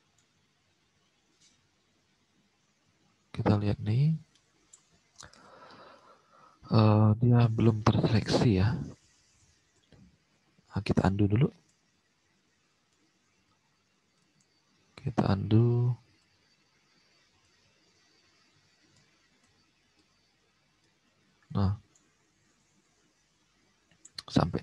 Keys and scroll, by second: 9.7 4, 11.5 ctrl+z, 12.7 ctrl+z.